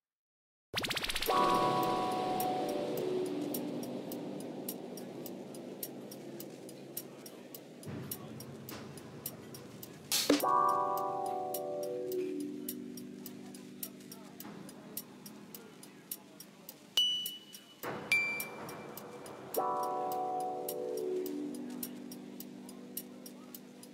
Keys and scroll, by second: 3.9 s, 6.4 Tab, 14.9 Tab, 17.2 s, 17.5 Tab.